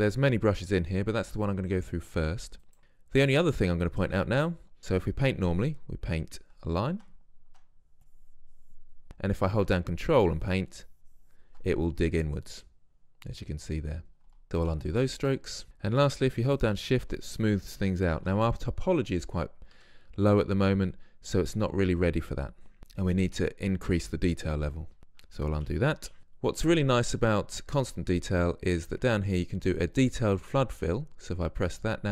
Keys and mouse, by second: 2.8-5.0 middle drag, 5.0-7.2 drag, 7.4 middle click, 7.4 click, 7.5-8.2 middle drag, 8.2 click, 9.0-10.2 middle drag, 10.2-12.4 drag, 12.4-13.0 middle drag, 14.4 ctrl+z, 14.8 ctrl+z, 15.0 ctrl+z, 15.6 ctrl+z, 19.8 Tab, 25.0 Tab, 25.2 ctrl+z, 25.8 ctrl+z, 26.2 ctrl+z, 28.4-32.1 drag.